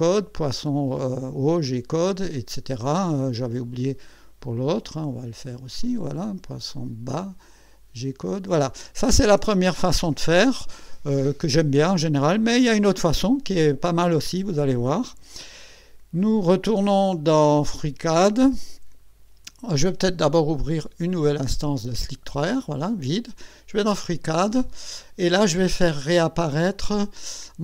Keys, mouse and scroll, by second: 1.4 click, 4.1 click, 5.8 click, 7.7 click, 20.0 click, 21.1 click, 23.7 click, 25.7 scroll up 1.